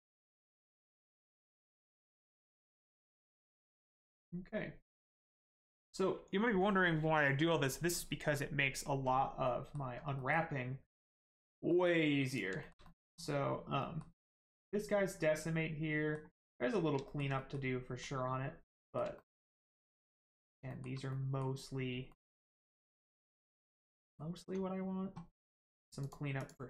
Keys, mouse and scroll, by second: 1.5 middle click, 2.9 scroll down 1, 3.2 middle click, 3.8-4.1 scroll up 1, 4.1 middle click, 9.0 scroll down 1, 9.4 middle click, 9.9 scroll down 1, 10.1 middle click, 12.3 click, 12.6 shift+middle click, 12.8 middle click, 14.2-14.5 scroll up 1, 14.5 middle click, 17.0 shift+middle click, 17.3 middle click, 17.4 middle click, 19.1 shift+middle click, 19.5 middle click, 19.6 middle click, 19.9-20.2 scroll up 1, 20.3 middle click, 20.7 shift+middle click, 21.1 middle click, 21.1 middle click, 21.6 scroll up 1, 22.1 shift+middle click, 22.6 middle click, 22.7 middle click, 25.4 click.